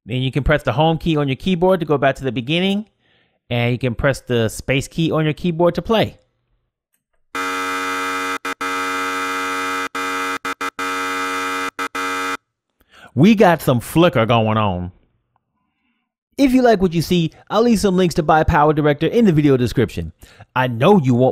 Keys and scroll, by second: 0.3 Home, 2.9 space.